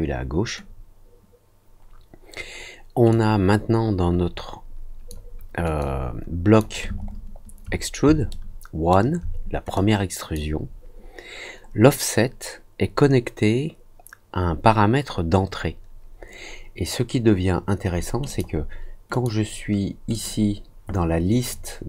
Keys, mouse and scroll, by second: 3.0-5.0 drag, 5.7 click, 7.0 ctrl+middle click, 7.2 ctrl+middle click, 8.2 alt+middle click, 9.7 click, 18.2 click, 19.0 click, 20.1 click.